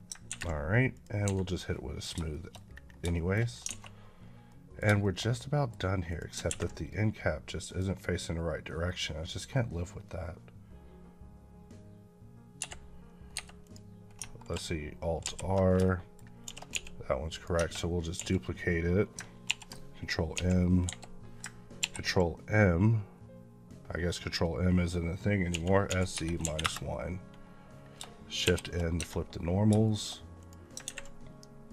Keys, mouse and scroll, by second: 0.8 click, 1.1 Escape, 1.6 middle click, 2.1 shift+middle click, 2.4-2.8 scroll up 2, 2.8 scroll down 2, 3.0 shift+middle click, 3.4 scroll down 1, 4.3 middle click, 4.9 shift+middle click, 5.9 click, 7.5 click, 12.4 Escape, 13.5 click, 15.1 alt+r, 15.7 shift+middle click, 16.3 shift+d, 16.6 x, 17.2 click, 17.4 Tab, 19.3 ctrl+m, 20.2 z, 21.7 ctrl+m, 25.3 s, 26.0 KP_Subtract, 26.5 KP_Enter, 27.6 scroll up 1, 28.3 shift+n, 29.2 Tab, 29.4 scroll down 1, 29.7 shift+middle click, 30.2 click.